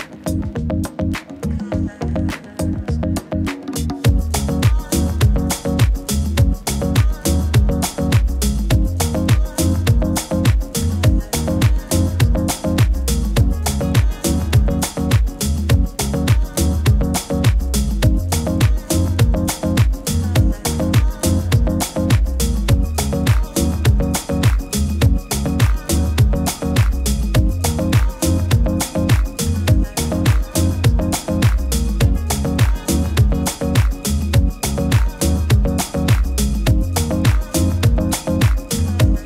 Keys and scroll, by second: 7.2 alt+z, 7.6 alt+z, 24.7 super++, 24.8 super++.